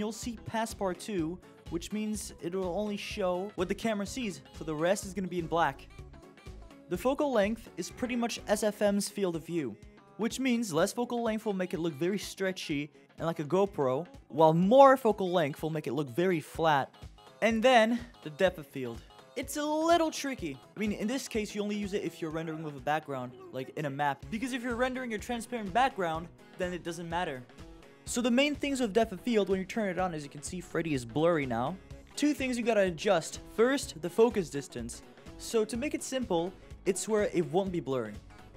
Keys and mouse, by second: 1.4-6.5 drag, 7.9-9.6 drag, 10.2 shift+f, 12.7 click, 14.8 shift+f, 17.2 click, 22.0 click, 24.6 click, 25.2 click.